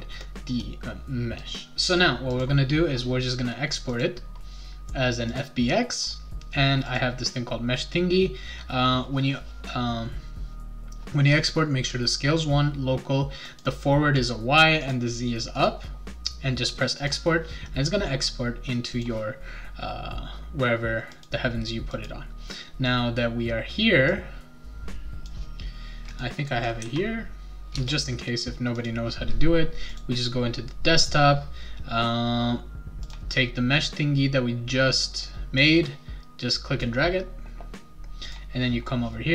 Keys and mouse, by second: 2.3 click, 3.9 click, 5.3 click, 6.8 click, 13.5 click, 14.2 click, 14.8 click, 15.5 click, 17.0 click, 18.9 click, 21.1 click, 21.9 click, 24.0-25.2 drag, 26.1 click, 27.7 Return, 28.7 click, 29.9 click, 33.0 click, 35.6-36.8 drag, 38.3 click.